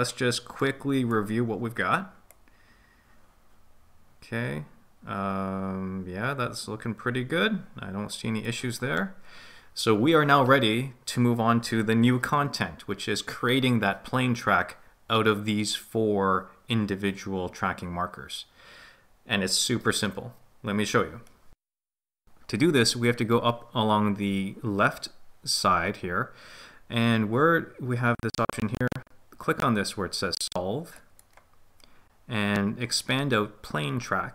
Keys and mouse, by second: 0.6 middle click, 2.3-8.6 drag.